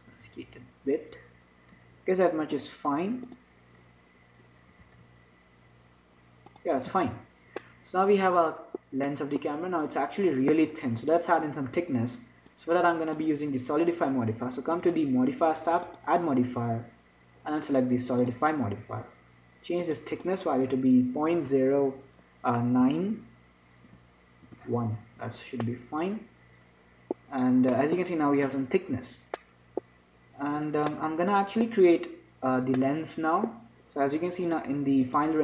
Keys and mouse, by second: 3.8-6.8 drag, 5.0 s, 7.2 z, 7.6 middle click, 8.6-12.7 middle drag, 12.7-14.7 drag, 15.0-18.1 drag, 20.1-24.9 drag, 26.0 middle click, 26.5-35.4 middle drag.